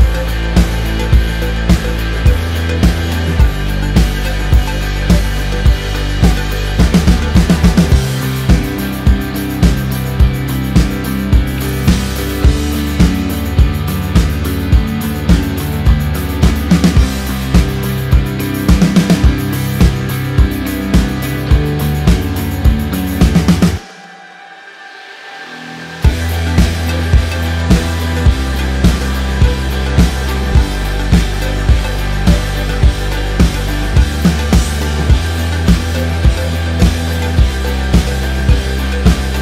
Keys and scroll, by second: 2.0 space, 12.5 ctrl+z, 14.7 space, 20.6 ctrl+t, 25.8 ctrl+=, 26.9 Return, 27.5 ctrl+=, 28.1 ctrl+t, 33.2 ctrl+=, 34.2 ctrl+-, 34.6 ctrl+t, 39.3 ctrl+=.